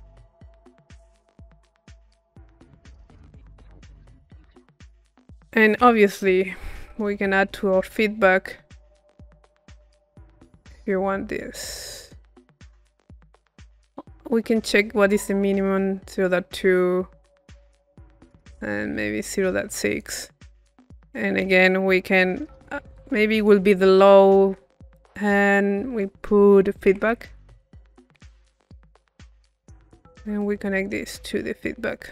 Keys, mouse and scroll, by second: 2.0-4.4 drag, 5.4 click, 6.1 p, 7.6 click, 9.0-20.5 drag, 20.5 middle click, 21.0-22.0 right drag, 22.0 middle click, 22.6 c, 23.4 click, 23.9 middle click, 24.2-28.1 drag, 29.6 click, 30.4 click, 31.0-32.1 drag.